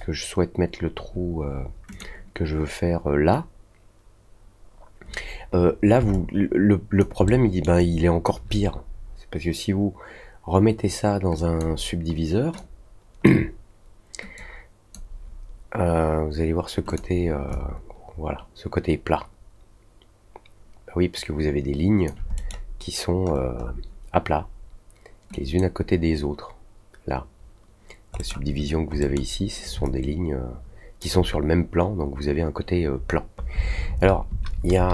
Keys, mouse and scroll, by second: 1.8 click, 6.1-6.9 alt+drag, 7.2-7.6 alt+middle drag, 7.7-8.2 alt+drag, 11.3 click, 12.5-13.2 drag, 14.3 click, 16.8 click, 17.4-22.0 alt+drag, 22.3 middle click, 23.2 scroll up 1, 23.5 middle click, 25.3 drag, 28.0 scroll up 1, 28.1 middle click, 28.9 middle click, 29.8-30.9 alt+drag.